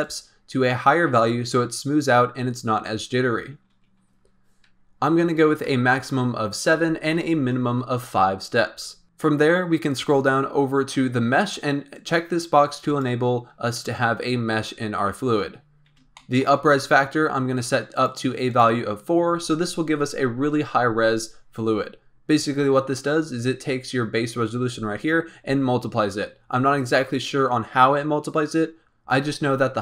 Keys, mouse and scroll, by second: 0.0-3.0 drag, 9.2-10.2 scroll down 5, 10.2-12.0 scroll down 6, 12.0 click, 12.8 click, 15.5-16.1 scroll up 3, 16.1-16.7 shift+middle drag, 16.7-17.9 scroll down 1, 17.9-19.2 drag, 23.1-24.8 scroll up 11, 24.8-28.2 scroll down 10.